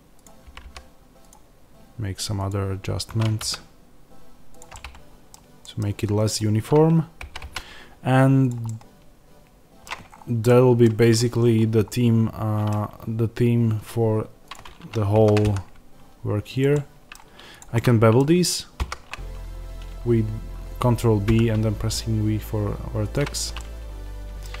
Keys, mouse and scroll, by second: 0.3 g, 1.2 click, 3.0 g, 4.5 click, 4.6-6.2 middle drag, 6.2 click, 7.2 g, 8.4 click, 8.6-14.4 middle drag, 9.8-10.4 scroll down 1, 10.8 Tab, 11.3 scroll up 1, 12.6 Tab, 14.4 click, 15.1 ctrl+b, 16.5 click, 16.6 middle click, 17.5 click, 17.7-23.0 middle drag, 18.7 ctrl+b, 23.0 click, 23.5-24.6 middle drag, 24.4 scroll down 1.